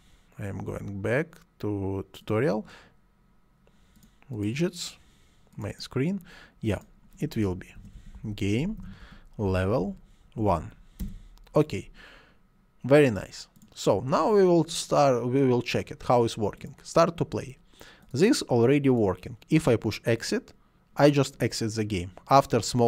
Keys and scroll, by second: 7.5-10.4 typing, 11.0 Return.